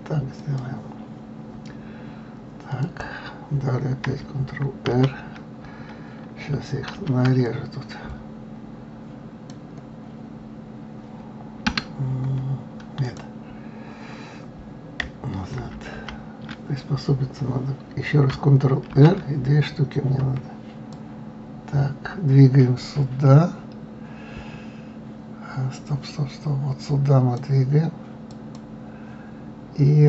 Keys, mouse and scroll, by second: 3.2 click, 5.2 ctrl+r, 13.4 click, 16.0 ctrl+z, 16.4 ctrl+z, 19.2 ctrl+r.